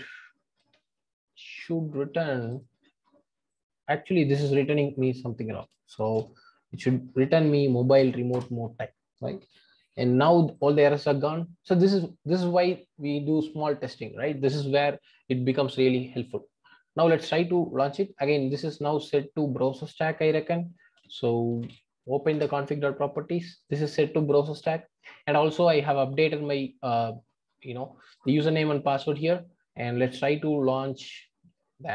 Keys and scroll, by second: 8.3 Return.